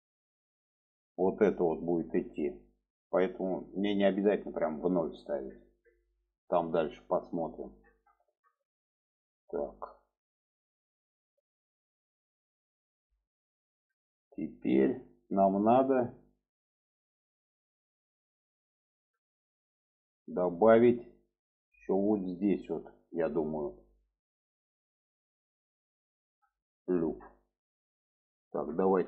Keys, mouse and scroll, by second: 7.0 middle click, 7.8-9.3 alt+middle drag, 9.8 middle click, 11.4 alt+z, 12.1-18.5 middle drag, 19.3-20.4 middle drag, 20.6-21.6 middle drag, 22.9-25.0 middle drag, 25.8-27.1 middle drag, 27.5 middle click.